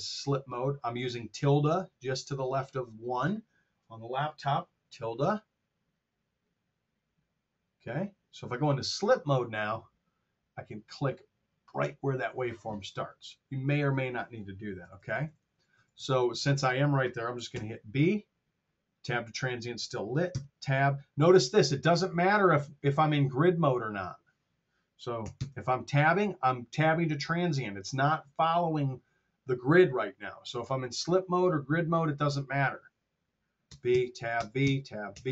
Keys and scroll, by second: 14.8 r, 17.5 b, 20.3 Tab, 25.2 b, 25.5 Tab, 33.6 b, 33.9 Tab, 34.2 b, 34.5 Tab, 34.9 b.